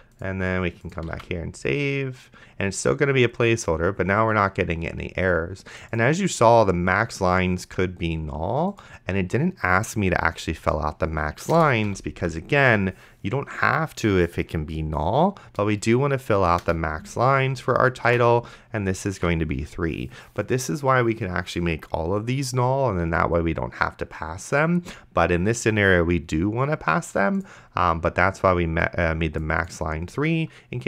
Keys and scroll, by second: 1.4 ctrl+s, 11.6-12.6 typing, 16.9 Return, 18.1 3, 19.4 ctrl+s.